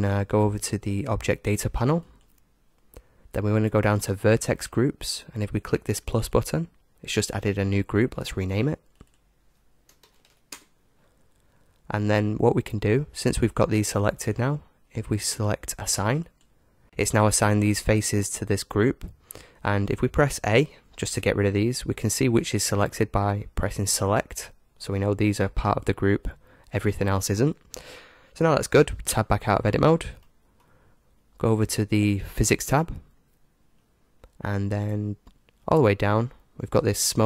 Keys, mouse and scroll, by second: 2.1-3.9 drag, 6.2-12.6 drag, 16.3 click, 20.6 a, 23.3-26.0 drag, 29.1 Tab, 29.7-32.2 middle drag, 32.6-34.5 drag, 34.3-37.2 middle drag.